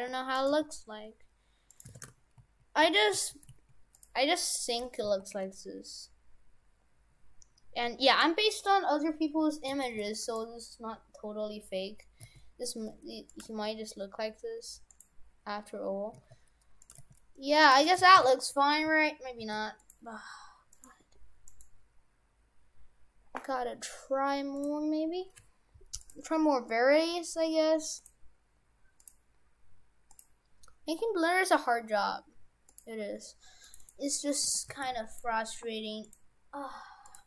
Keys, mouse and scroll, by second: 0.5 g, 1.9 shift+f, 5.1 s, 9.8 shift+f, 12.3 s, 13.5 g, 16.1 s, 17.1 g, 17.9 right click, 18.1 shift+f, 20.8 right click, 21.1 Tab, 21.5 right click, 22.3-23.1 scroll down 2, 23.1-23.8 scroll down 1, 24.6 click, 26.1 click, 28.0 click, 30.1 click, 34.5 shift+f, 36.1 click.